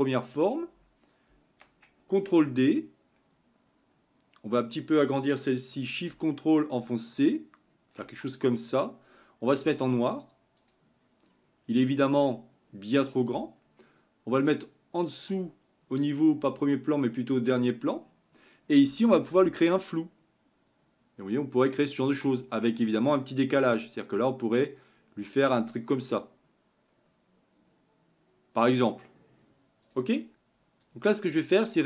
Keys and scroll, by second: 2.7 ctrl+d.